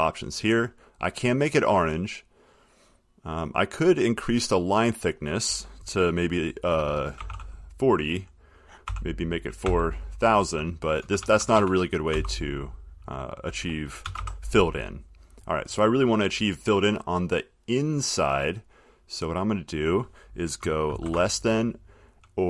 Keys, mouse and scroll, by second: 0.5 click, 1.4 click, 4.9 click, 7.1-7.9 typing, 9.0 0, 9.8 0, 11.2 BackSpace, 11.4 BackSpace, 11.6 BackSpace, 11.7 BackSpace, 14.2 BackSpace, 14.3 BackSpace, 15.3 click, 17.4-21.1 drag, 21.1 <.